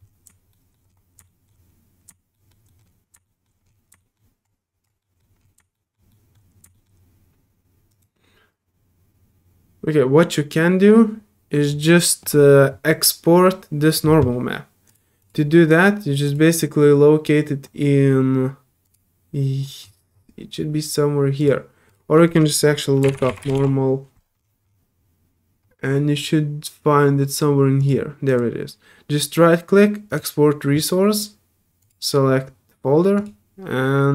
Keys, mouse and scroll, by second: 0.0 alt+middle click, 0.5 alt+middle click, 1.2 alt+middle click, 2.8 alt+middle click, 3.2 alt+middle click, 4.0 alt+middle click, 4.4 alt+click, 5.0 alt+middle click, 5.4 alt+scroll down 1, 5.7 alt+middle click, 6.1 alt+middle click, 6.7 alt+middle click, 7.9 alt+right click, 14.9 click, 15.2 click, 16.2 click, 18.8 click, 19.8 middle click, 20.1 middle click, 21.4 click, 21.9 click, 24.4 middle click, 24.4 scroll up 1, 27.8 click, 28.3 right click, 30.1 click, 31.8 click, 33.1 click.